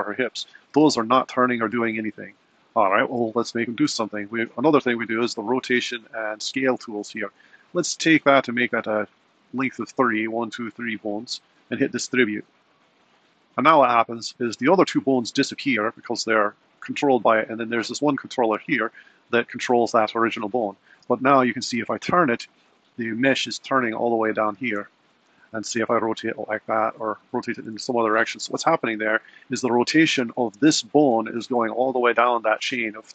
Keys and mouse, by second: 0.8 r, 8.9-14.1 drag, 17.1 click, 21.0 r, 24.4 r, 25.6 r, 28.5 r.